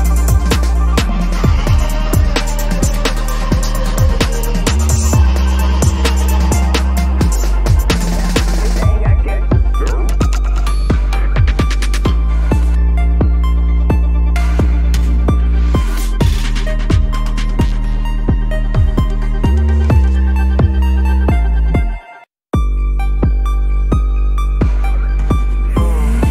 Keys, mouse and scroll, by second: 0.5 Return, 1.8 ctrl+z, 2.6 ctrl+-, 2.8 ctrl+-, 3.1 ctrl+=, 3.4 ctrl+=, 3.5 ctrl+=, 4.2 ctrl+-, 4.4 ctrl+-, 4.9 ctrl+-, 5.5 ctrl+=, 5.7 ctrl+=, 5.7 ctrl+=, 5.9 ctrl+=, 6.1 space, 6.8 ctrl+=, 7.5 ctrl+=, 8.0 space, 8.5 ctrl+t, 11.1 right click, 20.5 Return, 21.0 ctrl+-, 21.1 ctrl+-, 21.3 ctrl+-, 21.5 ctrl+-, 21.6 ctrl+-, 21.7 ctrl+-, 22.0 ctrl+-, 23.0 ctrl+=, 23.2 ctrl+=, 23.5 space, 24.1 ctrl+=, 24.4 ctrl+=, 24.8 space, 25.4 ctrl+=, 25.7 ctrl+=, 26.1 ctrl+=.